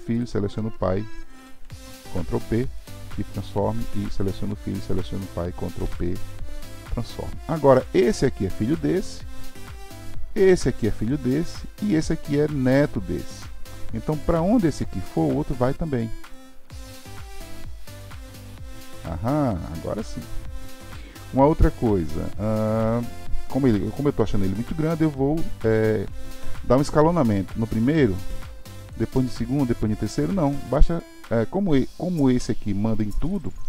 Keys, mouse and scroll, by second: 0.2 shift+click, 1.4 ctrl+p, 4.1-4.9 drag, 5.8 ctrl+p, 7.9-8.7 drag, 10.4-11.1 drag, 11.9-12.7 drag, 14.0 click, 14.3 g, 16.3 click, 16.5 g, 18.4 click, 18.6 g, 20.2-23.3 middle drag, 28.8 drag, 29.1 s, 30.8 click.